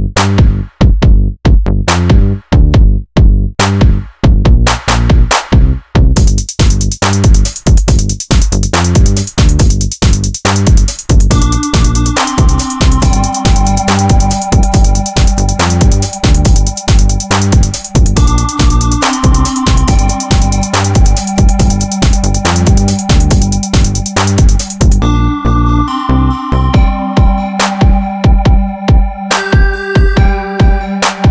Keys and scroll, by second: 2.8 ctrl+1, 3.3 ctrl+r, 3.6 Escape, 4.7 ctrl+r, 5.0 Escape, 5.5 ctrl+e, 8.0 ctrl+e, 8.8 ctrl+1, 16.0 ctrl+r, 16.4 Escape, 17.2 ctrl+e, 19.5 ctrl+e, 20.4 ctrl+e, 21.5 ctrl+e, 22.8 ctrl+e, 24.5 ctrl+e, 25.4 ctrl+r, 25.6 Escape.